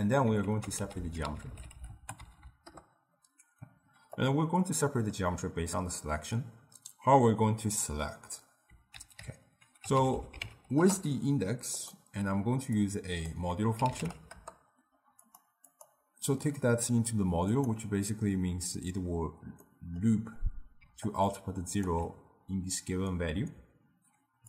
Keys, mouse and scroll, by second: 0.5 ctrl+a, 2.4 Down, 4.9-7.9 middle drag, 9.0 ctrl+a, 12.8-15.4 drag, 15.7-18.8 drag, 19.7-20.9 middle drag, 20.9 d, 21.1 click, 21.9 d, 21.9 d.